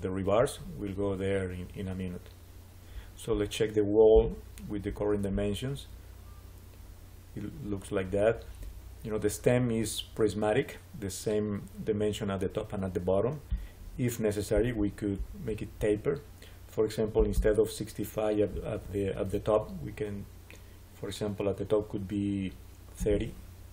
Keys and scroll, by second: 22.6-23.5 typing.